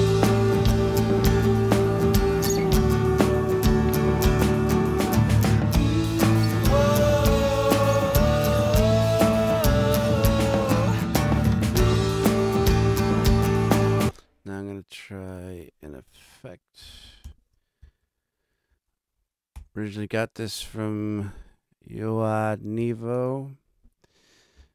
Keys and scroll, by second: 13.8 space, 17.2 shift+super+n, 18.0 shift+super+Right, 18.3 super+Down, 19.5 super+Return.